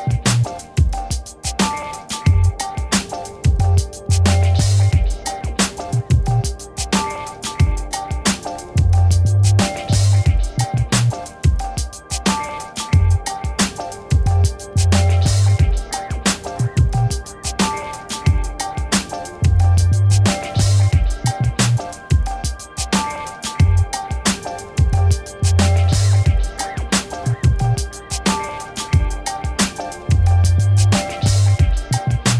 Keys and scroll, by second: 8.7 v, 20.0 0, 30.9 ctrl+t.